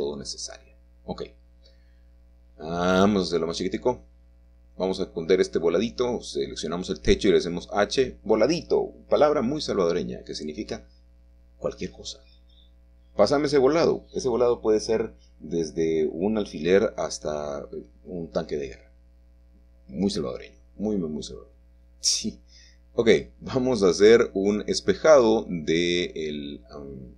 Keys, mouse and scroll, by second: 0.5-0.9 scroll up 2, 0.9-2.3 scroll down 2, 1.3 middle click, 3.1 s, 3.9 click, 5.1 middle click, 5.3 click, 7.5 h, 8.3 click, 10.3 r, 12.1 Return, 12.1 typing, 15.3 middle click, 15.4-16.0 scroll down 1, 17.1 middle click, 17.4 scroll down 1, 17.5-18.4 scroll up 1, 22.2-23.7 drag, 24.5 click, 25.1 Tab.